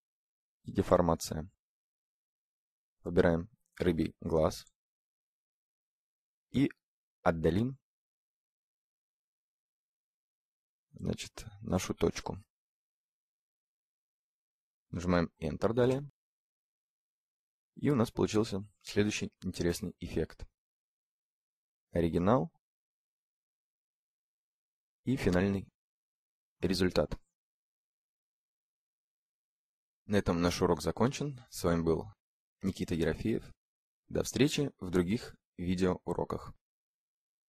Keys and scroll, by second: 14.4 Return.